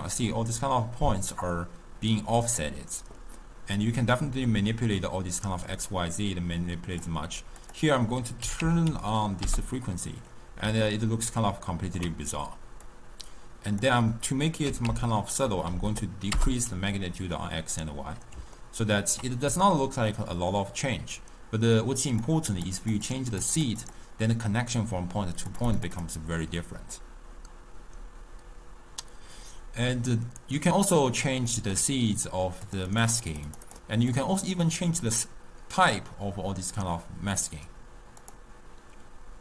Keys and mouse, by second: 3.8-6.9 drag, 7.6-10.7 drag, 10.9-12.9 ctrl+middle drag, 12.9-16.0 drag, 18.6-20.4 ctrl+middle drag, 20.4 click, 22.2-29.0 drag, 30.9-32.7 middle drag, 32.7-37.3 drag.